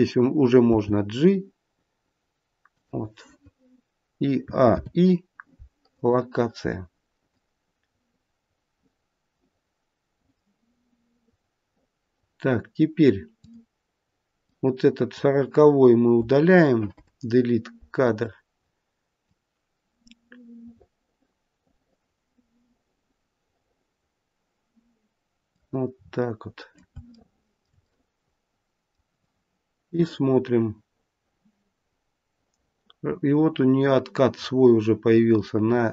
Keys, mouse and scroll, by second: 0.5 g, 4.3 a, 4.6 i, 7.3 click, 14.4 click, 16.8 Delete, 19.1 click, 25.9 scroll up 4, 27.0 shift+middle click, 27.9 middle click, 29.8 click.